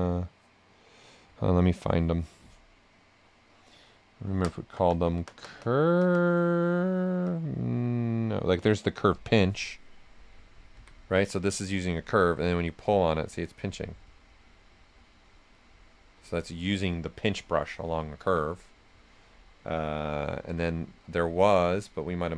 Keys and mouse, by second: 9.1 click, 10.7 x, 11.2-12.5 drag, 12.5-13.8 drag, 13.8-18.1 right drag, 17.0-17.7 typing, 18.1 ctrl+z, 19.7 b.